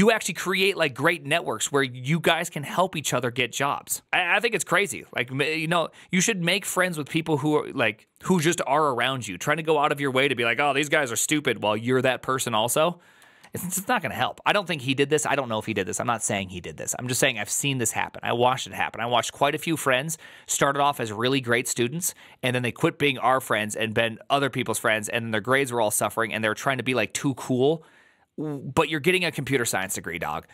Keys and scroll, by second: 13.3 alt++.